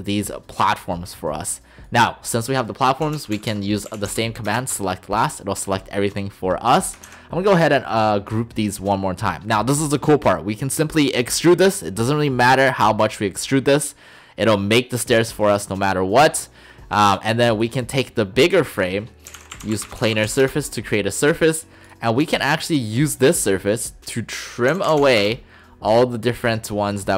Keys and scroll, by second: 3.1-4.1 typing, 4.5 Return, 7.1 ctrl+g, 19.3-20.3 typing, 20.4 Return, 24.7 typing, 25.2 Return.